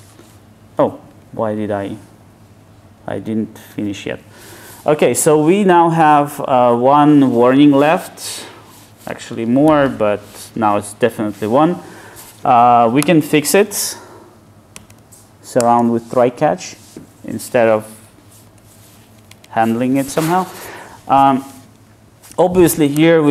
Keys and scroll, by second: 1.1 super+z, 2.6 super+z, 9.7 alt+super+l, 13.0 F2.